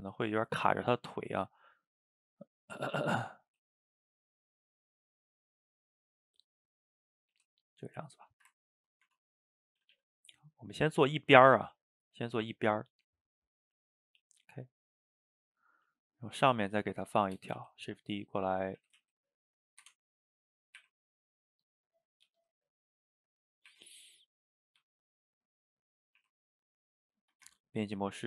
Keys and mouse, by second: 0.7 click, 0.8 middle click, 1.5 g, 2.3-3.3 middle drag, 3.3 click, 3.5 g, 4.6 click, 4.7 g, 7.2 click, 7.4 g, 8.1-9.1 shift+middle drag, 9.1 Tab, 9.6 middle click, 9.8 a, 10.0 a, 10.2-15.8 middle drag, 15.8 shift+middle click, 16.7 drag, 16.9-17.6 middle drag, 17.6 shift+d, 18.8 r, 20.1-20.8 middle drag, 20.8 r, 21.8-22.3 middle drag, 22.3 g, 23.3-23.7 middle drag, 23.7 r, 24.8 g, 25.5 middle click, 26.2 r, 27.2 shift+middle click, 27.5 Tab.